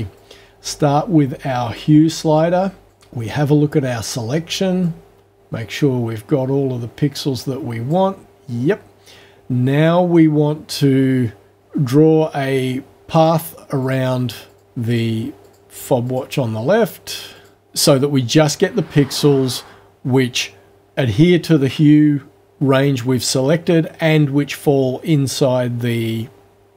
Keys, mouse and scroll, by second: 0.2-1.9 drag, 2.9 click, 4.9-8.1 drag, 11.5 click, 13.2 click, 13.8 click, 14.5 click, 14.9 click, 15.4 click, 16.1 click, 16.8 click, 17.4 click.